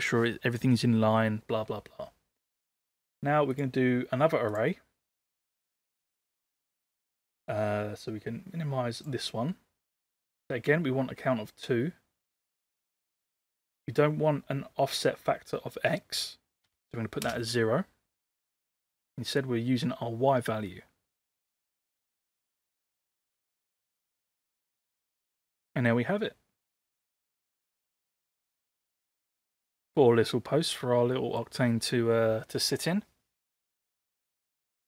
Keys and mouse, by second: 3.6-4.6 drag, 9.0 click, 12.6-13.7 drag, 15.0-18.5 drag, 19.5-25.1 drag, 27.8-29.1 middle drag, 29.4-31.4 middle drag.